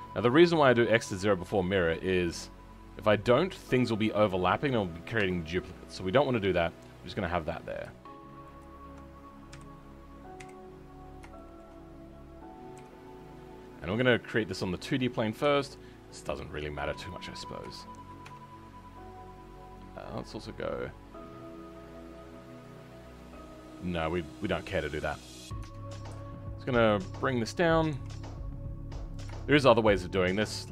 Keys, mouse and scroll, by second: 0.1-0.5 scroll up 2, 2.3 g, 6.1-8.5 middle drag, 8.5 alt+click, 9.5 KP_3, 10.9-11.3 scroll up 2, 11.3-12.7 shift+middle drag, 12.7 g, 15.4 r, 17.6 shift+middle click, 18.2 Tab, 29.3-30.5 shift+middle drag, 30.5 e.